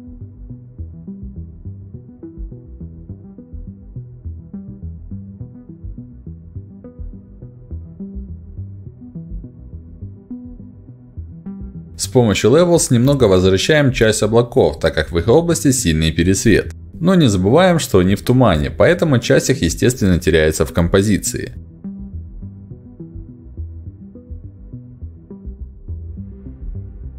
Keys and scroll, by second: 5.3 ctrl+s, 19.2 ctrl+m.